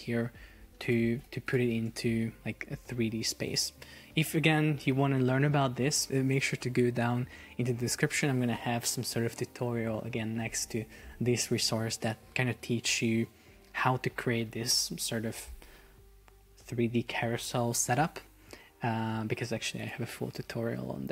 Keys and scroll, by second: 2.1 shift+Down, 3.1 shift+Up.